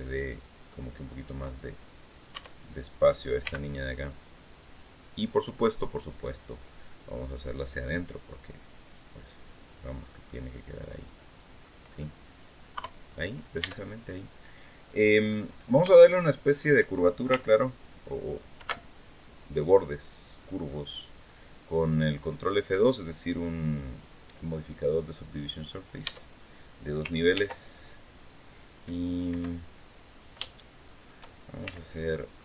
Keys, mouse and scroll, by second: 2.1 Tab, 3.2 g, 4.5 click, 5.0-6.2 middle drag, 7.7-9.7 drag, 10.0-11.5 middle drag, 11.6-12.0 scroll up 2, 12.5 KP_3, 13.4 Tab, 14.5 scroll down 2, 15.0 scroll up 2, 15.7 shift+middle click, 18.3 ctrl+2, 25.8 Tab, 27.1 ctrl+r, 29.0 Escape, 30.2 shift+middle click, 31.4 shift+c, 32.1-32.4 middle drag.